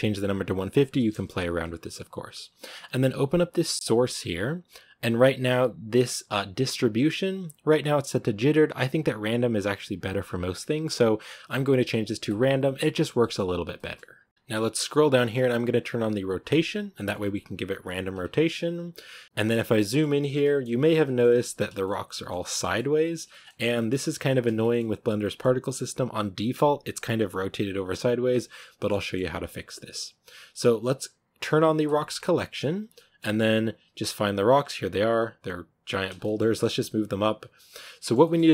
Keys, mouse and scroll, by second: 0.4 click, 13.1-16.4 middle drag, 16.4-19.4 drag, 19.4-19.9 middle drag, 19.9 scroll up 2, 20.2-20.6 shift+middle drag, 20.6 scroll up 1, 20.9-21.2 shift+middle drag, 21.2 scroll up 1, 21.3 a, 21.7-27.8 middle drag, 27.8-28.6 scroll down 1, 28.6-29.0 shift+middle drag, 29.0-29.6 scroll up 1, 31.7 click, 32.7 scroll down 1, 32.8-34.1 middle drag, 34.1 right drag, 35.0-35.3 shift+right drag, 35.9 scroll down 2, 36.1-36.4 middle drag, 36.4 g, 37.9-38.5 shift+middle drag.